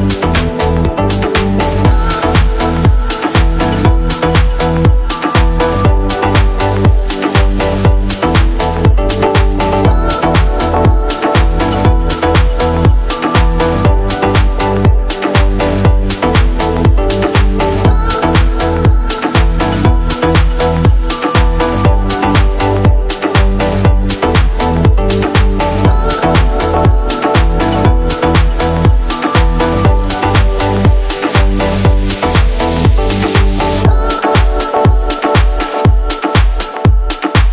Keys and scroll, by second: 0.0-0.5 typing, 7.1 BackSpace, 12.5 ctrl+l, 13.1 shift+l, 18.7-23.1 typing, 23.9 alt+Tab, 35.3-35.7 typing.